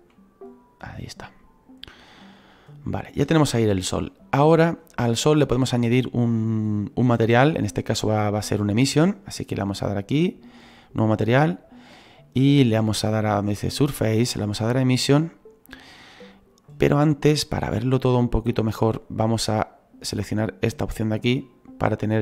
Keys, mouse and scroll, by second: 10.6-22.2 drag.